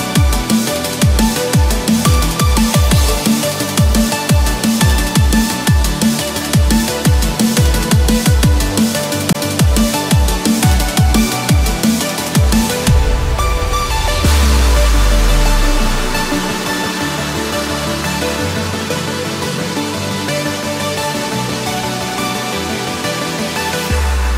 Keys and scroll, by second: 9.8 ctrl+-, 11.1 ctrl+-, 15.0 ctrl+-, 16.6 ctrl+-, 16.9 ctrl+=, 18.9 ctrl+=.